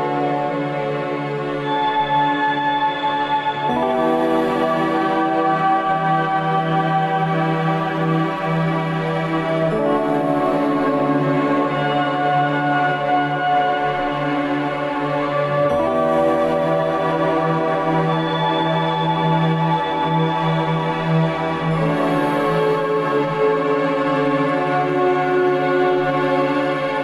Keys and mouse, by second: 0.8-1.6 middle drag, 2.9-4.8 drag, 4.8-5.7 middle drag, 7.0 click, 9.8-10.2 shift+middle drag, 12.5 F4, 13.5 Tab, 14.3 Tab, 16.5 click, 18.0 F4, 19.4-20.4 middle drag, 20.8 right click, 22.1 click, 22.4 right click, 23.4-24.0 drag, 24.9-25.9 drag, 25.9 right click, 26.7 click.